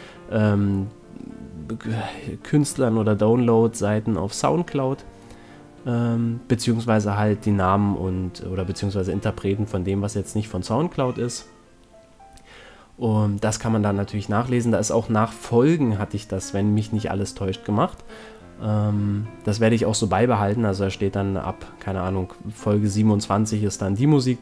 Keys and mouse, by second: 0.3 KP_1, 1.6 x, 4.2 s, 8.5-10.6 drag, 11.3-12.7 right drag, 12.7 s, 16.2 middle click, 16.7 right click, 17.2 KP_1, 18.0 KP_Decimal, 21.1 s, 23.6-24.4 drag.